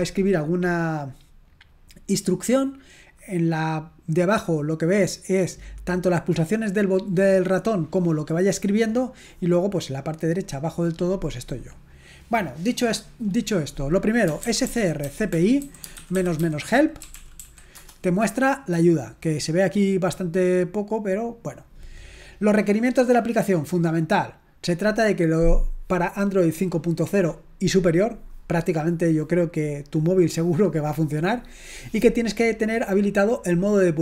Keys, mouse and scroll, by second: 3.1 click, 12.7 click, 14.2-17.9 typing, 22.5-24.0 scroll down 1.